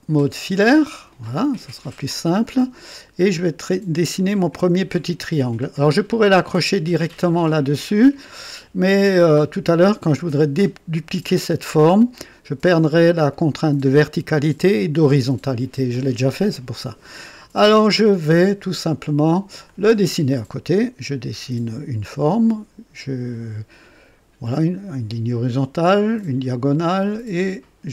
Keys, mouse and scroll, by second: 0.3 click, 1.5 scroll up 2, 2.1 scroll down 2, 2.5 right click, 5.6-6.0 scroll up 2, 6.2 right click, 17.5 right click, 17.5 click, 19.6 click, 21.0 click, 24.4 click, 26.1 click.